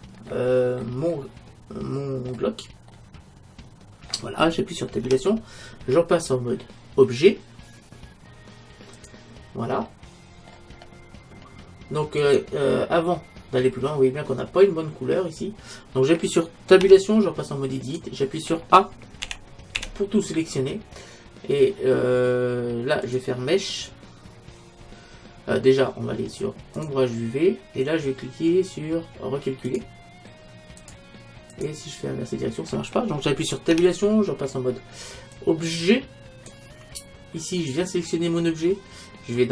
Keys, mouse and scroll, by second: 0.3-4.6 middle drag, 4.8 middle click, 5.1 Tab, 9.9-12.2 middle drag, 12.2-13.9 right drag, 13.9 middle click, 14.6 middle click, 15.3 middle click, 16.8 Tab, 19.2 a, 19.8 a, 26.8-28.6 drag, 29.7-33.3 drag, 33.7 Tab, 37.6-39.4 right drag.